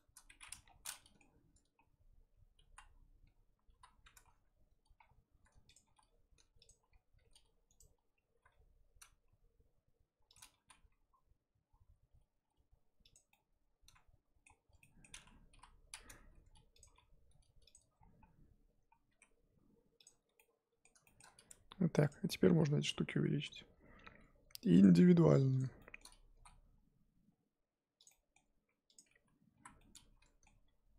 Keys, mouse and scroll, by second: 0.6 scroll down 2, 0.9-2.6 middle drag, 2.6 ctrl+KP_1, 3.7 ctrl+KP_7, 5.0-5.3 scroll up 1, 5.3 r, 5.8 g, 7.2 r, 8.3 r, 10.5 g, 13.3-15.5 middle drag, 15.5 KP_1, 16.1 r, 16.8 g, 17.9-18.9 scroll down 3, 18.9 scroll down 1, 19.1 s, 20.3 middle click, 21.2-21.8 scroll up 4, 21.5 Tab, 22.1 click, 22.8 l, 23.4 l, 25.6 click, 25.8 shift+middle click, 26.3 s, 28.1 middle click, 28.9 click, 29.5 l, 29.8 middle click, 30.6 g.